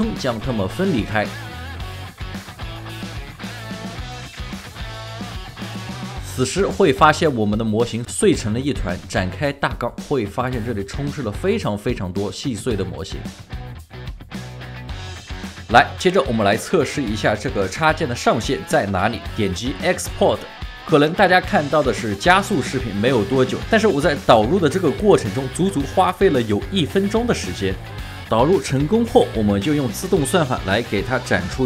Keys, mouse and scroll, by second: 2.3-2.6 scroll up 1, 2.6 double click, 3.1 shift+right click, 3.6 alt+click, 3.8 alt+middle click, 4.1 alt+right click, 4.2 alt+middle click, 4.3 double click, 4.4 shift+right click, 4.8 double click, 5.0 alt+click, 5.0 alt+click, 5.1 double click, 5.3 alt+right click, 5.4 double click, 5.5 alt+right click, 5.7 alt+middle click, 6.3 f, 14.9 ctrl+alt+shift+4, 30.3 typing.